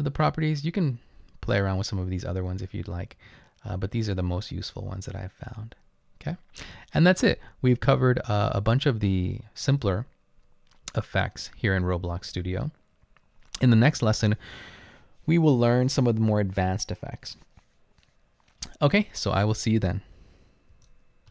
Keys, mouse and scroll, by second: 2.8-3.5 scroll down 2, 5.5-6.6 scroll up 3.